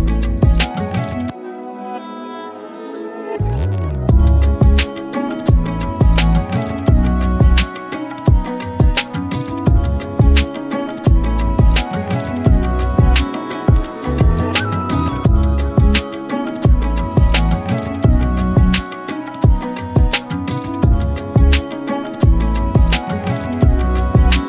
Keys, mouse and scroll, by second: 0.0 scroll up 9, 0.2 shift+middle click, 0.5 ctrl+KP_Add, 0.7-1.1 ctrl+KP_Add, 1.3 scroll down 9, 1.5 middle click, 1.7-2.0 scroll up 1, 2.0-2.7 ctrl+KP_Add, 2.8-3.5 scroll up 10, 4.3 KP_1, 4.5-4.9 drag, 4.9 alt+z, 5.1 Tab, 5.4 alt+z, 6.0 scroll down 3, 6.1 middle click, 6.5 z, 7.2 middle click, 7.6-8.2 scroll down 4, 7.8 middle click, 8.2 middle click, 8.6 Tab, 8.7-9.5 scroll down 1, 10.4 g, 11.1 KP_1, 11.5 Tab, 11.6 a, 11.7 s, 12.3 click, 12.8 s, 14.6 middle click, 14.9 right click, 15.5 Tab, 15.6-16.3 right drag, 16.3-17.5 drag, 17.5-18.3 middle drag, 20.1 click, 21.4 click, 21.6 scroll up 3, 21.9 scroll down 2, 22.0 middle drag, 22.3-23.5 scroll up 3, 22.4 shift+middle click.